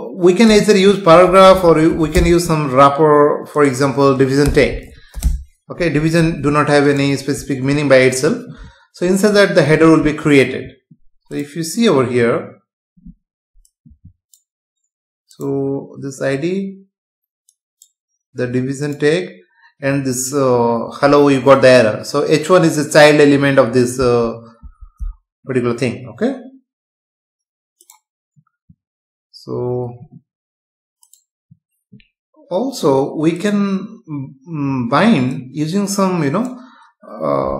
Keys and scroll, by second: 1.5 BackSpace, 4.4 BackSpace, 6.2 ctrl+s, 7.7 F5, 24.0 Escape.